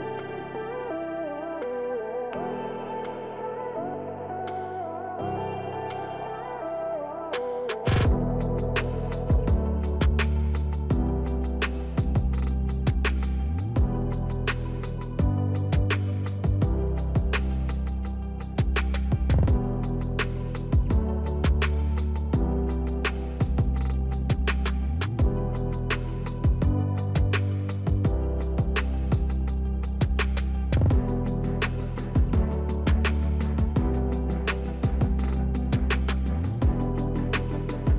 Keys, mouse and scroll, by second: 5.5 click, 5.5 click, 11.5 click, 15.1 click, 16.7 click, 16.9 Delete, 20.0 click, 24.1-34.1 drag, 34.6 click, 37.2 click.